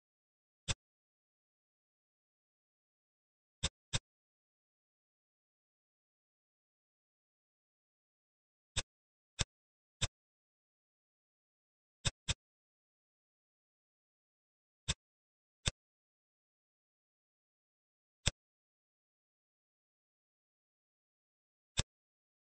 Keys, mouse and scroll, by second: 0.2-0.6 scroll up 1, 0.6-2.1 middle drag, 3.5 click, 3.9-5.4 middle drag, 9.3 click, 11.1 s, 12.2-13.7 middle drag, 13.7 s, 15.6 click, 17.2-18.2 scroll up 2, 18.2-19.7 middle drag, 22.2-22.4 scroll up 1.